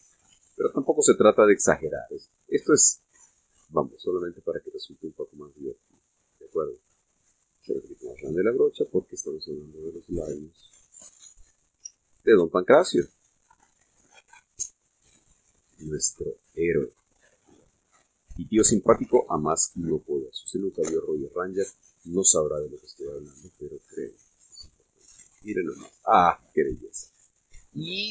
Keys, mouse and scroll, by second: 0.1 f, 1.0 click, 1.6 shift+middle click, 3.2-3.7 scroll up 1, 4.7-7.7 drag, 8.8 f, 9.4 click, 10.8-13.1 drag, 13.0 ctrl+z, 13.9-16.6 drag, 17.4-19.6 drag, 20.4-20.7 scroll down 1, 22.1 click, 23.7 click, 25.2 click, 26.1 scroll down 1, 26.6-28.0 middle drag.